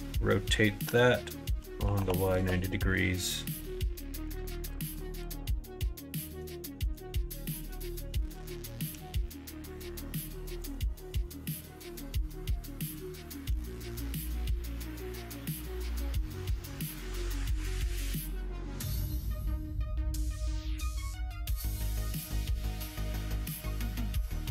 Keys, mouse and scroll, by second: 4.1 KP_1, 4.6 KP_3, 5.1 KP_9, 6.4 shift+middle click, 8.8 s, 12.1 s, 13.4 g, 18.9 shift+middle click, 21.0 middle click, 22.6 middle click, 23.9 f.